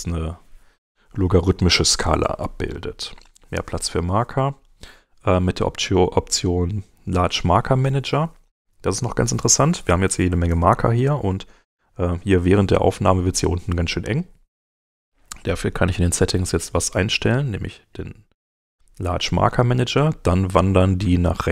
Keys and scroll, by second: 7.1 super+Tab, 16.1 shift+,.